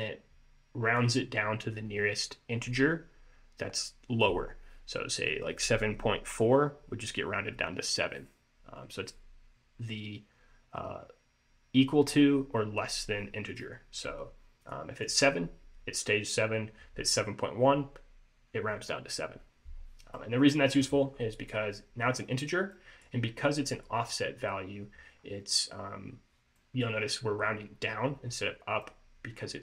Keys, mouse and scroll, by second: 14.8 click, 20.3 middle click, 21.2-22.8 scroll up 1, 22.8 scroll down 1, 22.8 middle click, 23.9 middle click, 25.4-25.8 scroll down 2, 26.7 middle click, 28.9 middle click.